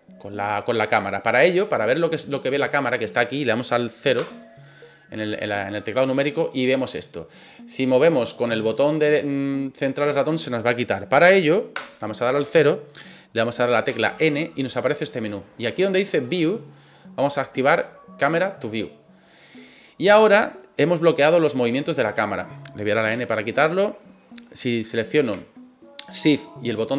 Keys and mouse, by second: 1.8-2.4 middle drag, 4.1 KP_0, 8.6-10.5 middle drag, 11.7 KP_0, 13.9 n, 15.9 click, 18.7 click, 23.1 n, 26.8-26.9 shift+middle drag.